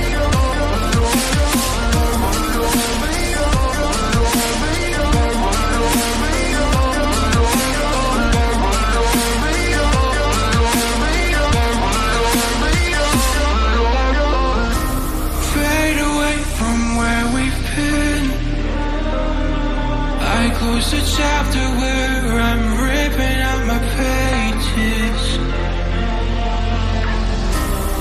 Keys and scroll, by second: 2.5 ctrl+a, 6.8-8.1 typing, 14.5 0, 25.5 ctrl+j, 27.5 shift+Down.